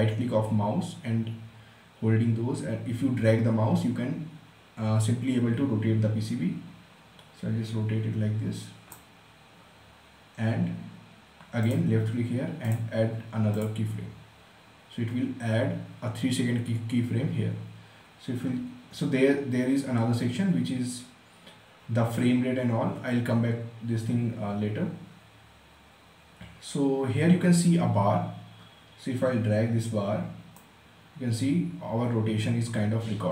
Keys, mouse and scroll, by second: 11.2 click, 30.1-33.3 drag.